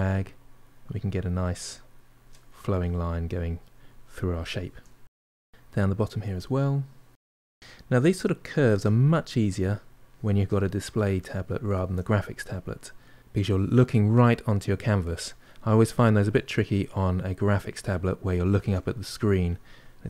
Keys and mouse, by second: 1.8 middle click, 2.3 ctrl+click, 2.9 middle click, 3.4 shift+click, 4.4 middle click, 5.2-6.2 ctrl+drag, 6.2-7.3 middle drag, 7.3-10.5 ctrl+drag, 10.5 middle click, 11.3 ctrl+click, 11.7 middle click, 12.3 shift+click, 13.0 middle click, 13.6-15.2 ctrl+drag, 15.2 middle click, 15.8-18.9 shift+drag, 18.9-20.0 middle drag.